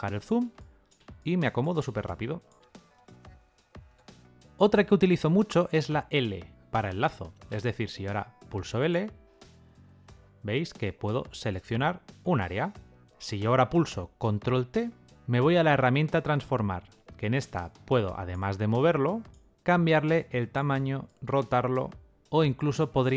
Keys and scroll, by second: 5.9 l, 8.4 l, 14.1 ctrl+t.